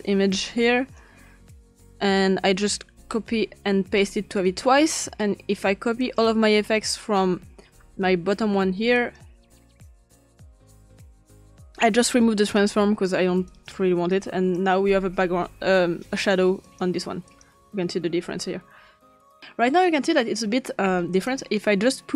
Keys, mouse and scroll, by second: 2.0 click, 3.0 ctrl+c, 3.8 ctrl+v, 4.4-4.8 drag, 5.2 click, 6.0 click, 7.0 click, 8.4 ctrl+c, 9.0 click, 10.2 ctrl+p, 11.2 ctrl+click, 12.4 click, 13.5 click, 14.1 click, 15.0 click, 15.6 drag, 16.6 click, 19.4 Return, 19.4-20.5 drag, 20.5-20.9 drag, 21.2 click, 21.6 click.